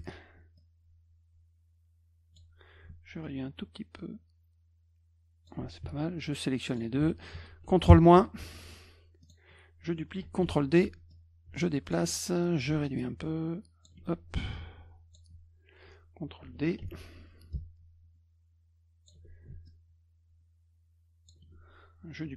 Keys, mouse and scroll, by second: 0.6 click, 3.2 ctrl+shift+click, 6.7 shift+click, 9.2 click, 10.5 ctrl+d, 11.1-11.9 drag, 12.8 ctrl+shift+click, 14.5 ctrl+click, 16.8 ctrl+d, 17.5-19.1 ctrl+shift+drag, 19.7 ctrl+shift+click.